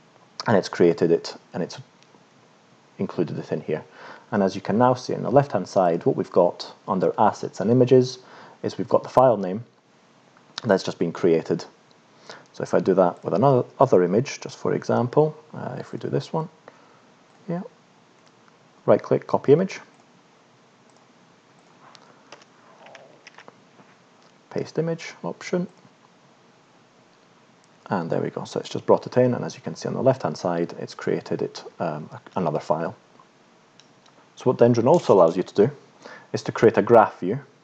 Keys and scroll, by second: 22.3 Return, 23.2 ctrl+shift+p.